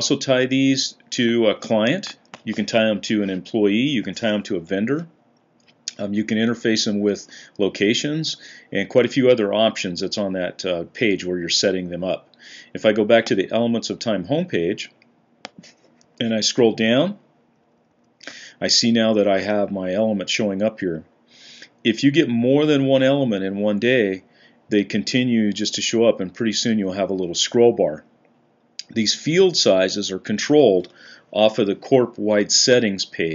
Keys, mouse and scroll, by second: 15.9-17.1 Down, 17.3 Down, 17.5 Down, 17.6 Down, 17.7 Down, 17.9 Down.